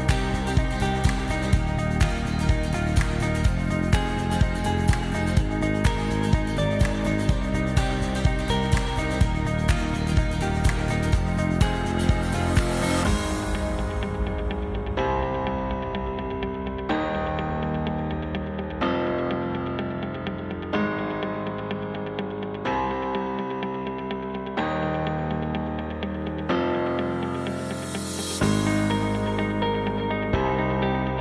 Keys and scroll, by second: 2.2 super+-, 18.7 BackSpace, 22.1 s, 22.8 super+s.